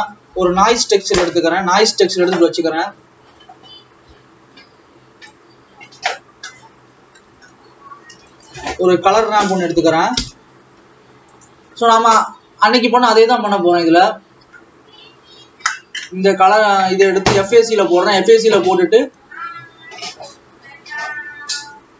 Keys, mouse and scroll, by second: 10.1 shift+a, 13.8 click, 14.6-15.1 scroll down 2, 15.8 click, 19.9-20.5 scroll up 10, 21.1-21.8 scroll up 4.